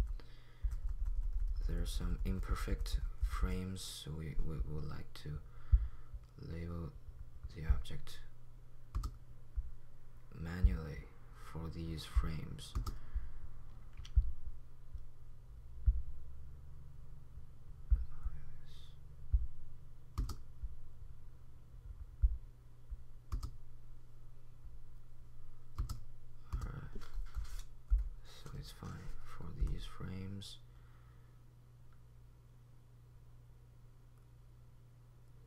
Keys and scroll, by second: 0.0-3.4 typing, 27.3-30.6 typing.